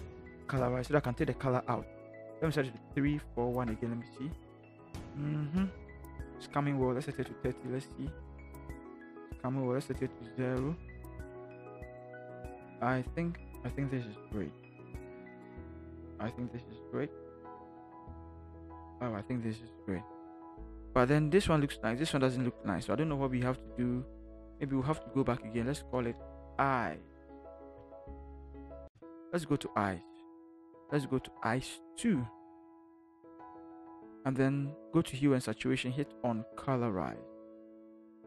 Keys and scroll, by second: 2.9 3, 3.2 4, 3.5 1, 7.3 3, 24.8 ctrl+shift+g, 26.3 i, 27.6 BackSpace, 28.1 c, 28.4 e, 28.9 Return.